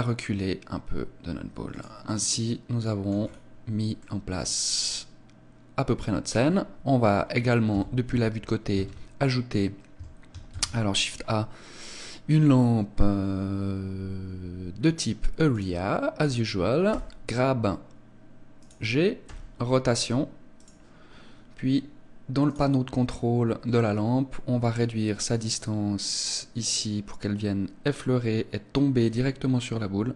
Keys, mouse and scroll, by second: 1.8 click, 2.1 middle click, 3.2 scroll down 6, 4.0 middle click, 7.8 KP_3, 8.8 ctrl+a, 10.6 shift+a, 16.9 g, 18.7 click, 19.3 r, 20.7 click, 22.5 click, 24.8 click.